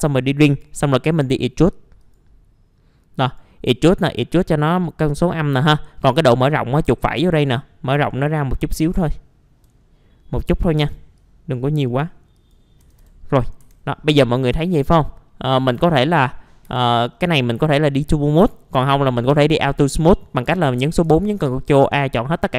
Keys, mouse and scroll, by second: 0.5 right click, 2.0 click, 3.2 right click, 3.7-5.3 drag, 6.1 right click, 7.2-8.2 drag, 9.1 alt+middle click, 9.8-10.5 scroll up 1, 10.8 right click, 11.2-12.2 drag, 13.0 click, 13.3 middle click, 13.6 F4, 13.8-14.6 scroll down 1, 14.9 scroll down 1, 15.3 middle click, 15.9-16.6 scroll up 1, 16.6 F4, 17.1-17.5 scroll down 1, 17.5 middle click, 17.9-18.2 scroll up 1, 18.7 F4, 19.6 middle click, 21.2 ctrl+a.